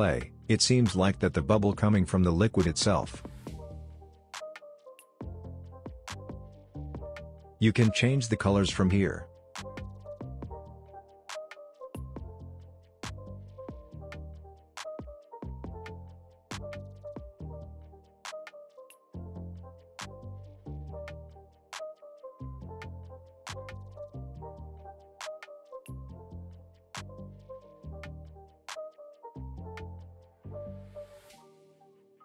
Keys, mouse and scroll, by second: 2.0 space, 2.4-2.9 scroll down 1, 2.9 scroll up 1, 3.3 space, 3.4-5.0 click, 3.8 space, 5.7 click, 8.2-15.5 drag, 24.4 space, 26.6 space, 26.9-28.0 scroll down 1, 28.0-28.3 scroll up 1, 28.4-29.8 scroll down 1, 29.8-30.2 scroll up 1, 30.2 space, 30.3-30.9 click, 30.7 space.